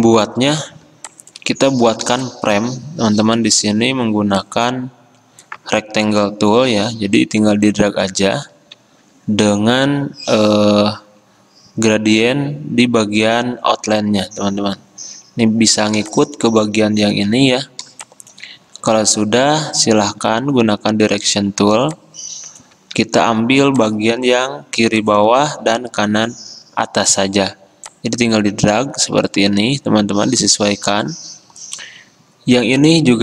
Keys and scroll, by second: 18.0 a, 24.6 ctrl+z.